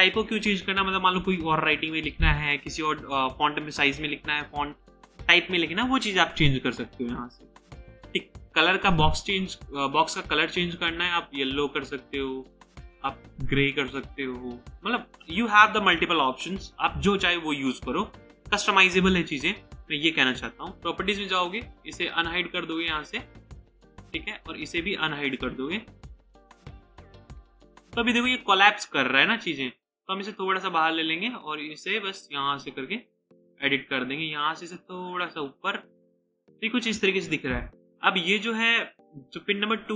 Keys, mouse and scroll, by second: 22.2 scroll up 1, 24.3 double click, 38.6 double click.